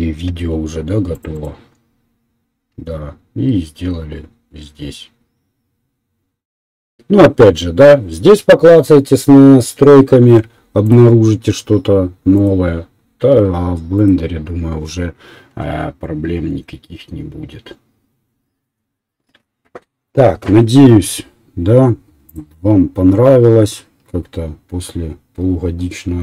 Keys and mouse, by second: 22.5-23.7 middle drag, 23.7-26.2 drag.